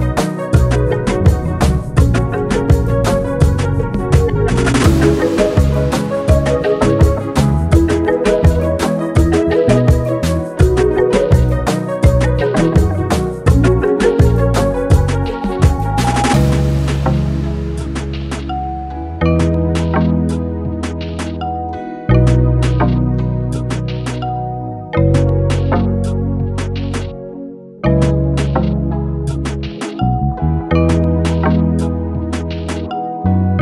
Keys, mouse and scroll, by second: 1.0-3.0 drag, 4.8 click, 8.0-10.3 drag, 10.3-13.4 drag, 16.5-19.7 shift+drag, 19.7 alt+scroll down 1, 20.8 space, 21.6-22.4 alt+scroll down 1, 22.4 space, 22.7 click, 22.8 space, 23.7-26.2 drag, 26.2 space, 26.3 click, 26.5 space, 27.0 alt+scroll up 1, 27.4-27.8 alt+scroll down 1, 28.7 click, 30.2 click, 33.3 click.